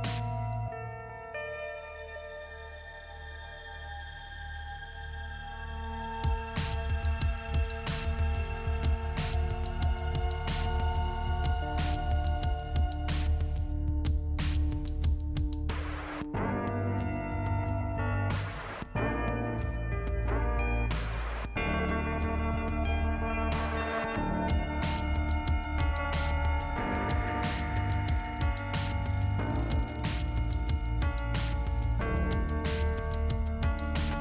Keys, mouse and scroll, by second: 1.5 click, 3.7 shift+Return, 4.4 click, 5.8 click, 6.8 click, 13.4 Delete, 14.5 middle click, 15.1 click, 16.3 click, 17.2 click, 18.3 click, 19.4 click, 21.6 click, 21.7 click, 23.0 click, 24.3 click, 25.4 click, 26.5 click, 27.3 click, 28.0 click, 30.0 click, 31.7 click, 33.3 click.